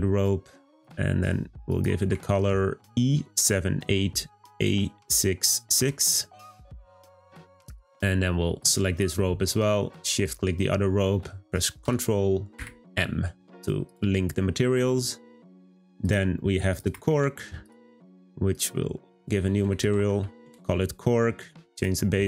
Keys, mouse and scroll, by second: 8.6 click, 10.2 shift+click, 11.8 ctrl+l, 13.9 click, 17.6 click, 18.5-21.8 drag.